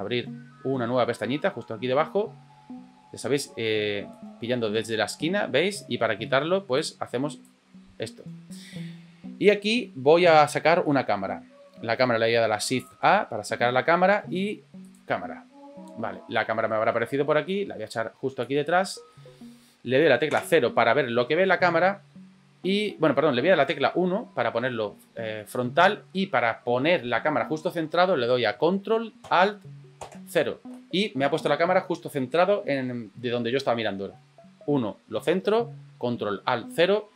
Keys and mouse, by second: 4.1-5.8 drag, 6.9 click, 10.9 middle click, 12.9 shift+a, 16.4 middle click, 17.5 click, 19.2-19.7 middle drag, 20.3 KP_0, 23.7 KP_1, 25.4-25.8 shift+middle drag, 30.0 ctrl+alt+KP_0.